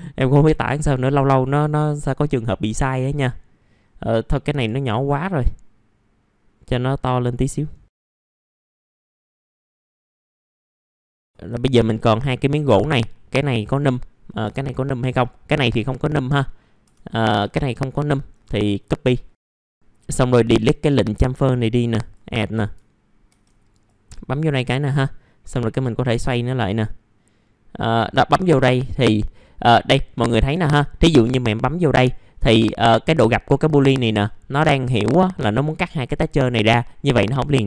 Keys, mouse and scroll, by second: 3.2 middle click, 3.4-4.5 scroll down 1, 5.0-5.4 scroll down 1, 6.0-7.9 drag, 8.4 middle click, 8.8 F4, 9.0 scroll down 1, 9.3 click, 9.4-9.9 scroll up 1, 9.9 scroll down 1, 10.2 middle click, 10.4 alt+middle click, 10.7-11.1 scroll down 2, 10.8 middle click, 11.1 scroll up 1, 11.3 click, 11.7 alt+middle click, 12.3 middle click, 12.7 alt+middle click, 13.4 click, 14.5 F4, 18.4 right click, 19.4 click, 20.6 right click, 21.2 click, 22.2 click, 23.9 click, 29.8-33.1 scroll up 1, 33.9 middle click, 34.4-35.1 scroll up 1, 35.7-36.1 scroll down 1, 36.4 middle click, 37.2 middle click.